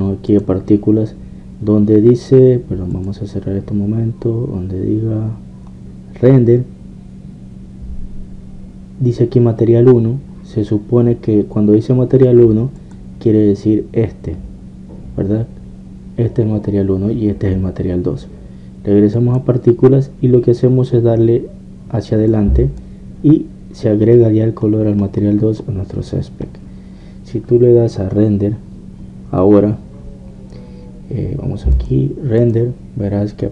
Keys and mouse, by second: 1.3-6.3 drag, 13.8-15.9 drag, 20.1-22.3 drag, 23.3-25.2 drag, 25.7 middle click, 31.8 middle click, 32.7 click.